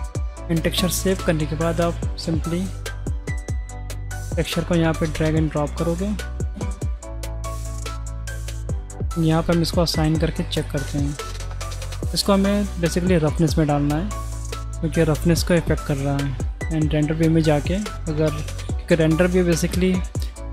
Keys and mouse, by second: 0.4 click, 8.2 click, 10.0-10.5 drag, 11.4-13.4 drag, 14.9-15.3 middle drag, 15.5 click, 16.1 z, 16.9 z.